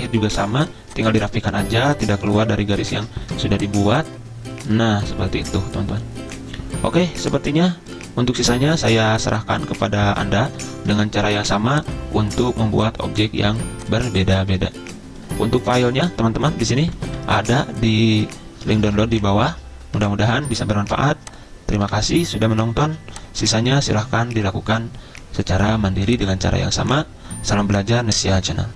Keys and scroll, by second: 3.0 ctrl+z, 11.0 ctrl+z, 13.5 ctrl+z, 16.6 Right, 16.6 Right, 16.8 Right, 16.9 Right, 17.0 Right, 17.1-18.7 Right, 18.6 ctrl+Page_Down, 18.7 ctrl+Page_Down, 18.8 ctrl+Page_Down, 19.0 ctrl+Page_Down, 19.3 ctrl+Page_Down, 20.0 ctrl+Page_Up, 21.9 Delete, 22.8 z, 26.2 z.